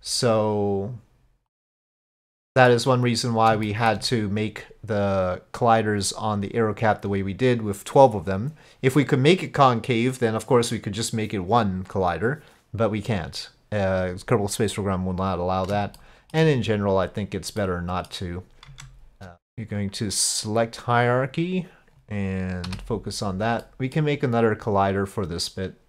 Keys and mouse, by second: 1.6 click, 2.2 middle click, 3.7 shift+middle click, 16.1 shift+middle click, 17.6 middle click, 19.8 Tab, 19.8-21.1 right drag, 22.7 KP_Divide, 23.6-24.0 middle drag.